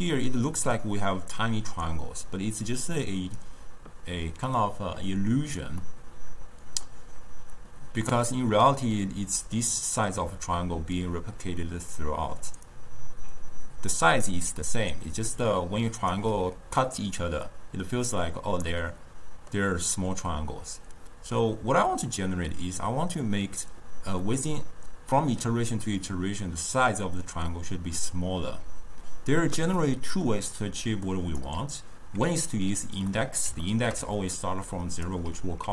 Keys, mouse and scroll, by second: 2.7 d, 5.9-8.0 middle drag, 8.0 d, 8.3-10.3 drag, 10.3-10.8 d, 11.0-12.0 drag, 12.0-12.7 d, 12.7-14.3 drag, 14.3 d, 15.2 d, 15.4 right click, 16.2 d, 18.7-21.7 middle drag, 24.3-27.3 middle drag, 29.8 middle click, 30.5-33.2 drag, 33.2-34.2 middle drag, 34.2 d, 34.4-35.1 drag, 35.1 d.